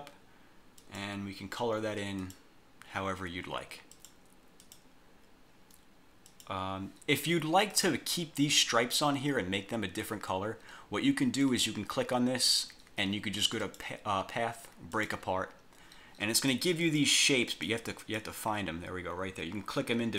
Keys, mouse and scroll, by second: 0.9 click, 2.3 click, 4.0 click, 4.8 click, 6.4 click, 7.8 click, 11.5 click, 13.8 click, 15.0 click, 16.5 click, 16.9 click, 17.6 click, 18.1 click.